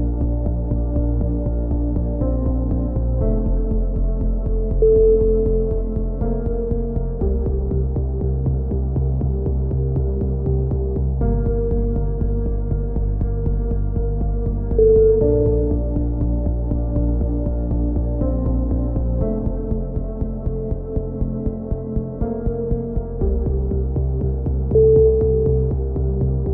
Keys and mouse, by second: 0.4-1.4 middle drag, 1.4 click, 2.5 a, 2.8 middle click, 3.1-4.6 right drag, 4.0-5.1 drag, 5.4 a, 5.7-7.9 drag, 5.8 z, 6.1 z, 7.9 right click, 7.9 z, 8.1 middle click, 8.3 z, 9.9-11.2 middle drag, 11.6 right click, 12.4 right click, 12.8 middle click, 15.2 middle click, 15.8 click, 17.0-19.9 typing, 18.3 middle click, 21.2 click, 22.0 right click, 23.1 right click, 23.7 middle click, 24.1 click, 24.9 a, 25.2 z, 26.0-26.5 drag.